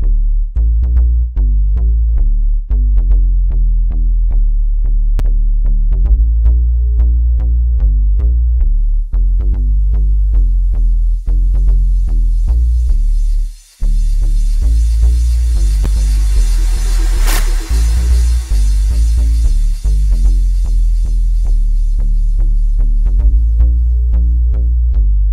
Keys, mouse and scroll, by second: 2.9 F1, 10.8-20.5 drag, 21.0 click, 22.3 click.